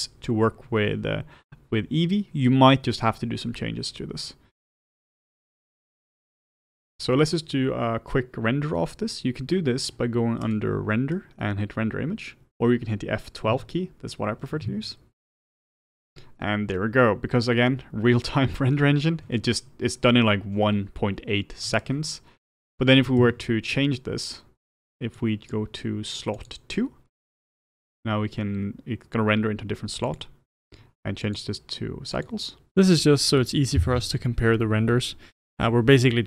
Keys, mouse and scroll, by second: 15.4 F12, 32.2-36.2 drag, 33.8 F12.